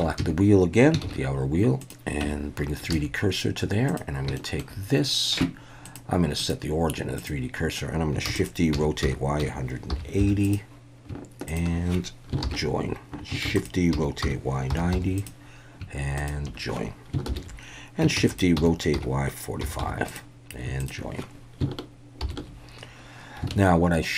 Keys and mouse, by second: 0.0 Tab, 0.2 a, 1.0 shift+s, 2.3 Tab, 2.9 alt+a, 3.9 click, 4.4 shift+click, 5.9-7.4 drag, 8.3-10.2 typing, 8.4 click, 10.5 click, 11.5 shift+click, 12.4 ctrl+j, 13.5-15.0 typing, 15.2 click, 16.2 shift+click, 17.3 ctrl+j, 18.2-19.8 typing, 20.1 click, 20.8 shift+click, 22.2 ctrl+j, 23.5 alt+a.